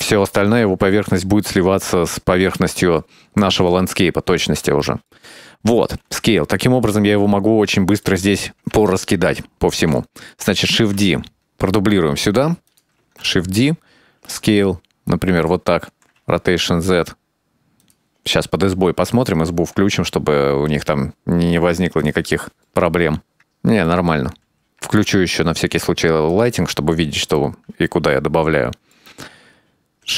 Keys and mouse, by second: 3.7-4.6 middle drag, 4.8-5.2 shift+middle drag, 5.3-6.0 middle drag, 6.9 s, 7.0-7.7 middle drag, 8.2-8.5 shift+middle drag, 8.7-9.2 middle drag, 9.5 shift+middle click, 10.2 shift+middle drag, 11.0 shift+d, 13.2 shift+d, 15.1 s, 15.9 r, 20.8 click, 21.3-21.7 shift+middle drag, 22.1 shift+middle click, 22.5-23.0 middle drag, 23.1 shift+middle click, 26.8 drag, 27.6-29.8 middle drag.